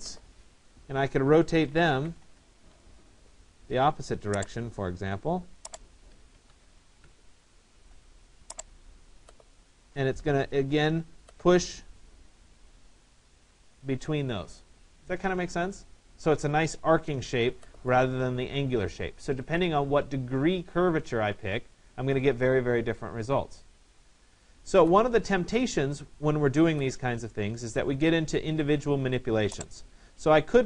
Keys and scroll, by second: 1.8 Return, 6.4 1, 6.6 5.